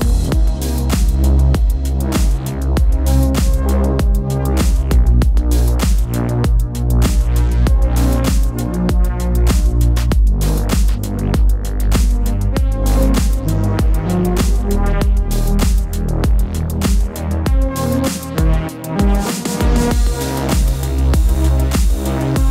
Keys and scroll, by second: 14.6 Return.